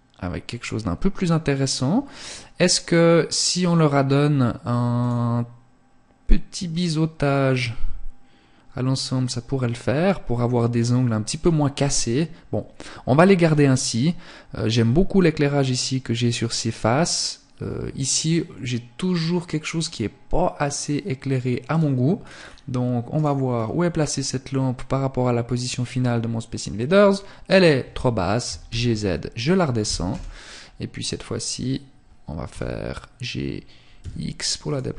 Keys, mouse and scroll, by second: 4.3 click, 19.7 click, 21.2-21.7 scroll down 2, 21.7-22.1 scroll down 3, 22.1 right click, 22.5-22.9 scroll up 1, 23.1 middle click, 28.4 click, 29.1 KP_0, 30.3-30.7 scroll up 2, 31.5 g, 33.7 click, 34.3 g.